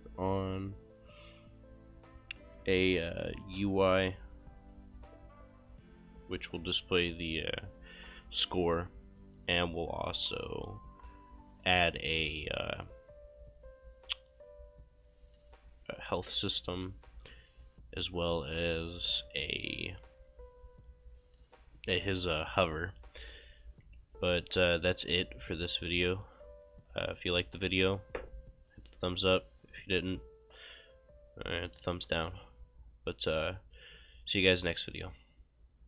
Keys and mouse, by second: 23.9-25.0 typing, 26.5-27.7 typing.